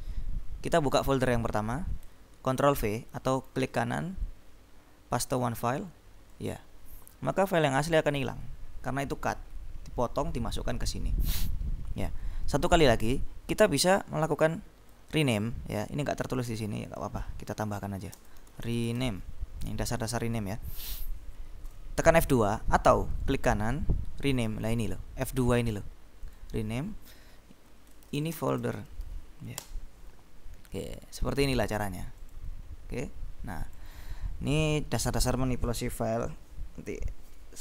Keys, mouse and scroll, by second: 1.1 click, 3.3 ctrl+right click, 5.4 click, 6.4 click, 7.5 click, 12.8 click, 14.0-16.0 drag, 17.0 click, 17.9-19.6 typing, 20.3 click, 21.8 F2, 22.8 Escape, 23.3 right click, 26.4 click, 27.9-29.6 typing, 29.7 shift+Return, 30.8 click, 32.2 click, 33.8 click.